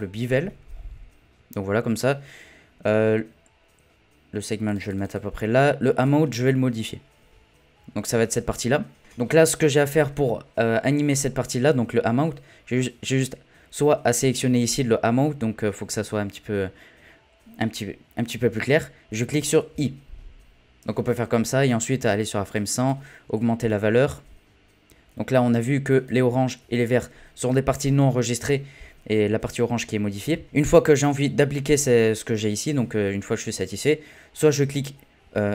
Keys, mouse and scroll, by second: 0.7-3.8 scroll up 5, 4.6-9.0 drag, 19.7 typing, 22.0-26.8 drag.